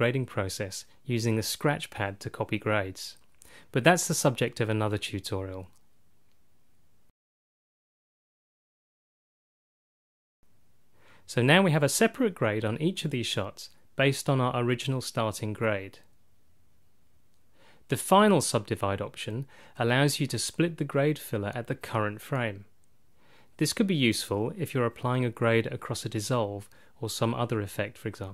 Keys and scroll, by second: 0.6 F6, 1.6 KP_1, 2.9 F6, 4.0 KP_2, 4.8 F6, 5.7 KP_3, 6.3 F6, 7.2 KP_2, 7.9 F6, 8.8 KP_3, 9.3 F6, 10.2 KP_2, 13.1 F5, 17.2 F5, 18.1 F5.